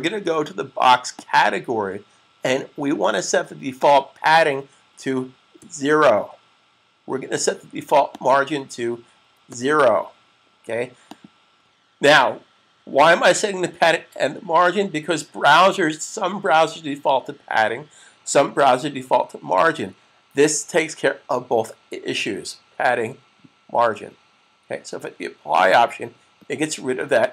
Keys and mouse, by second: 1.0 click, 3.7 click, 5.4 typing, 8.0 click, 10.9 click, 25.4 click.